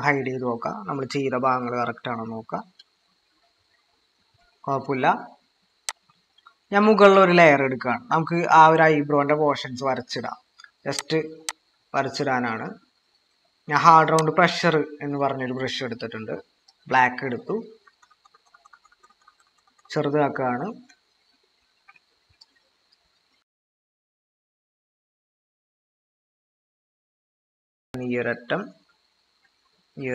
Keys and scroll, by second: 3.5 ctrl+=, 18.1-19.8 typing, 20.4 ctrl+=.